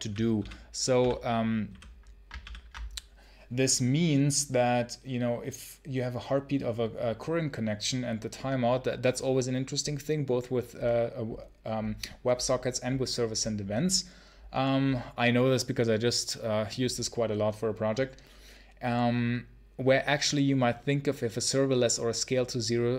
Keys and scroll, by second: 0.2 ctrl+super+l, 1.5 ctrl+super+h.